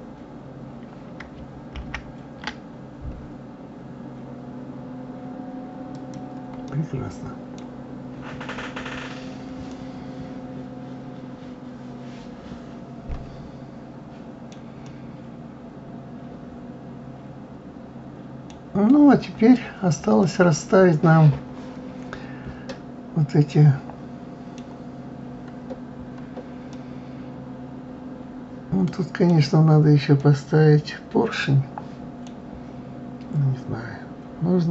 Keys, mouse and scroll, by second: 1.7 ctrl+b, 6.7-7.7 middle drag, 7.7-8.3 scroll down 2, 8.3-9.3 scroll down 2, 9.7-12.8 middle drag, 14.9-17.9 middle drag, 18.7 scroll down 2, 19.9-20.2 scroll down 3, 20.2-23.3 middle drag, 25.1-25.7 scroll up 3, 26.0 scroll up 1, 26.7-29.7 middle drag, 30.2-33.2 middle drag.